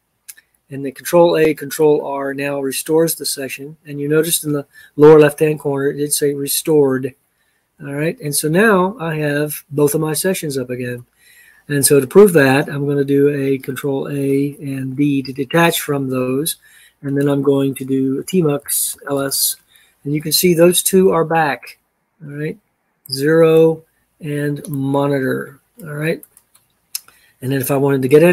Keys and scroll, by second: 14.1 ctrl+a, 15.3 d, 18.0-19.7 typing.